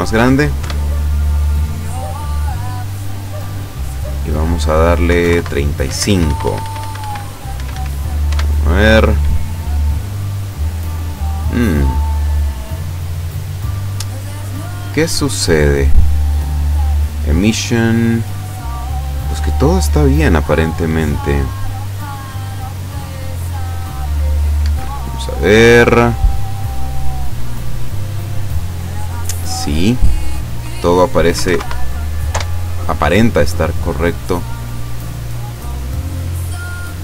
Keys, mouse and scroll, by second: 0.7 F12, 3.8 click, 5.1 KP_3, 5.2 KP_5, 5.4 KP_Enter, 5.9 Escape, 7.5 scroll up 1, 7.7 scroll down 1, 8.3 F12, 20.3 click, 21.1 click, 22.2 click, 23.0-24.1 scroll down 6, 24.2 scroll up 2, 24.6 Escape, 25.2-26.3 middle drag, 26.5 right click, 28.1 click, 29.5 click, 31.4 KP_6, 31.5 KP_5, 31.6 KP_Enter, 32.3 F12.